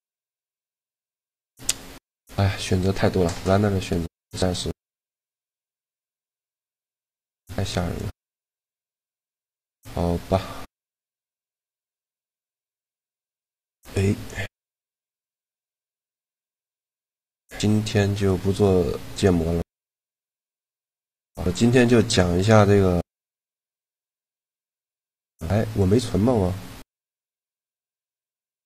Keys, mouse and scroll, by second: 1.4-5.6 middle drag, 6.1 middle click, 6.4 click, 6.7 a, 7.0 b, 8.1 x, 11.6 right click, 13.6 t, 18.1 middle click, 18.9 click, 19.0-23.4 middle drag.